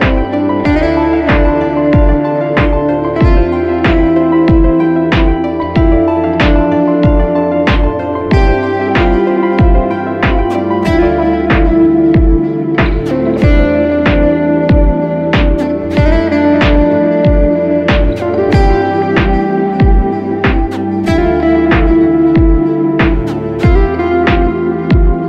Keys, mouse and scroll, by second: 6.6 alt+click, 13.6 right click, 15.3 double click, 18.2 [, 18.3 [, 18.4 [, 18.7 double click, 19.6 [, 19.8 [, 20.0 double click, 21.7 ], 21.9 double click.